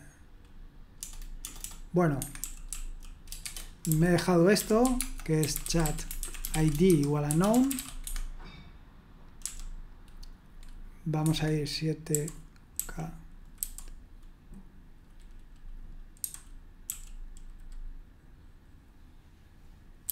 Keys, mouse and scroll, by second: 0.9-9.4 typing, 2.2 Escape, 11.2 Escape, 12.1-13.6 typing, 16.1-16.8 typing, 20.0 typing.